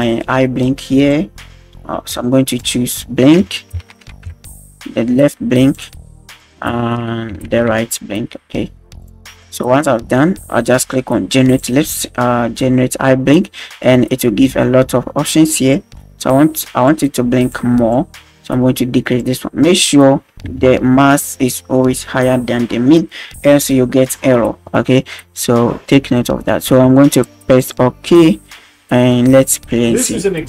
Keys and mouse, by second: 0.0-1.1 drag, 2.6-5.8 drag, 6.3-9.1 drag, 11.5-28.0 drag, 29.1 middle click, 29.6 space.